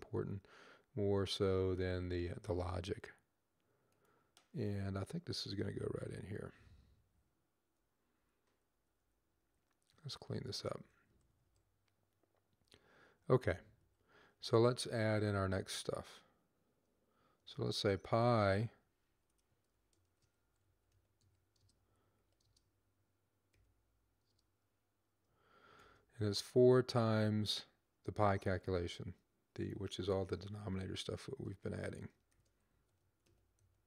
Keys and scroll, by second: 5.8 Up, 10.2 Down, 10.5 Right, 10.8 Right, 11.1 Right, 11.4 Right, 12.6 Right, 13.1 Left, 13.6 Right, 17.1-21.9 typing, 23.3 typing, 25.6 typing, 28.6 typing, 31.0-33.8 typing.